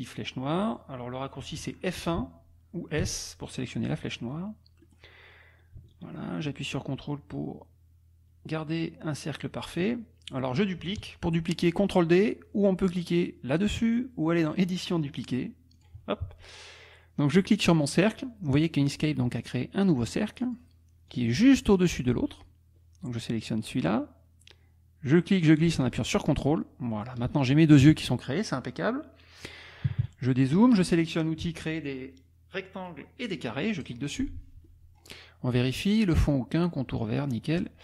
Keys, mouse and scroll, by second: 2.0 F1, 3.0 s, 5.0 click, 5.9-9.9 ctrl+drag, 14.5 click, 15.8 click, 20.1-21.8 drag, 25.2-27.4 drag, 27.8 KP_Subtract, 29.9 KP_Subtract, 33.8 click, 34.7-37.8 middle drag.